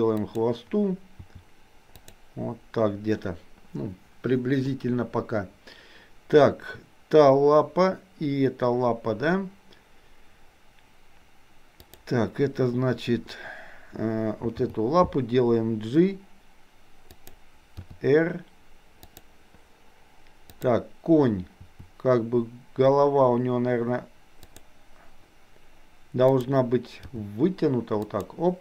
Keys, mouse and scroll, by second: 1.2 r, 11.7 click, 14.6 g, 17.8 r, 20.5 click, 21.6 r, 26.3 click, 27.0 g.